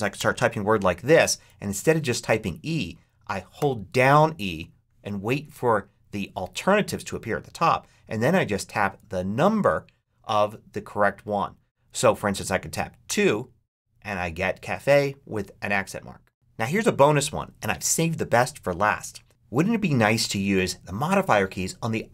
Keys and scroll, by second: 0.0-0.5 typing, 3.4 e, 12.9 2.